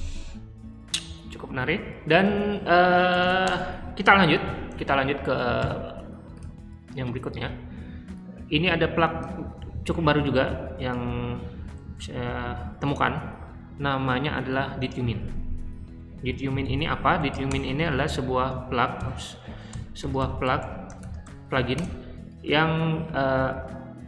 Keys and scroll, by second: 2.8-3.8 typing, 9.5 super+c, 11.6-13.6 typing, 14.5 super+v, 16.5-21.5 typing, 21.7 Return.